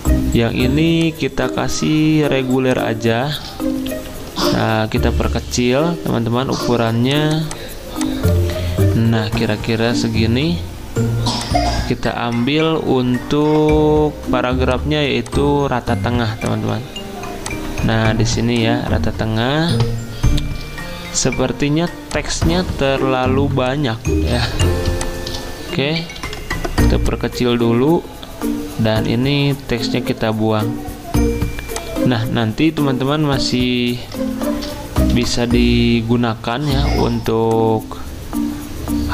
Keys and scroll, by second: 3.9 ctrl+t, 24.3 z, 26.2 v, 28.9 t, 33.5 ., 34.2 ctrl+shift+Down, 35.1 Delete.